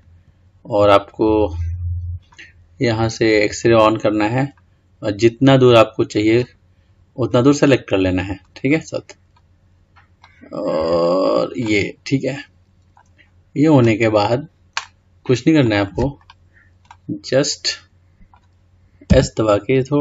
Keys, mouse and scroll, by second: 2.1-4.6 scroll up 1, 4.6 click, 7.5 middle click, 8.5 click, 11.8-13.4 middle drag, 13.4 scroll down 3, 15.9 click, 17.1-19.3 middle drag, 19.3 s.